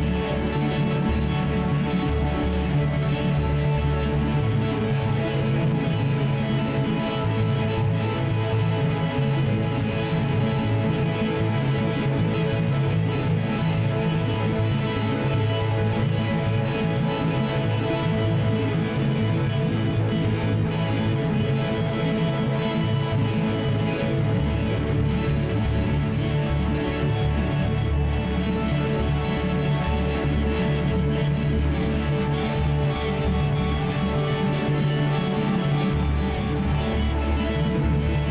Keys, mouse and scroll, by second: 4.1-9.7 right drag, 5.8 alt+k, 8.2 g, 15.4-16.9 middle drag, 16.9 F4, 17.8 g, 19.3 middle click, 20.1 F4, 20.1 middle click, 20.4 F4, 22.5 g, 26.4 middle click, 27.3 g, 29.7-33.1 middle drag, 30.6 c, 35.2 F4, 35.5-36.2 middle drag, 36.2-38.3 right drag.